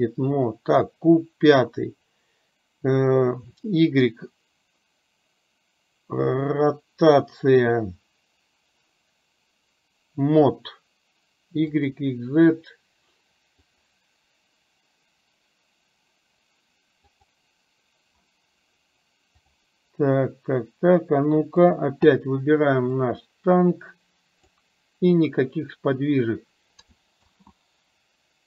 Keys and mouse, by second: 23.2-24.7 drag, 27.3 ctrl+z.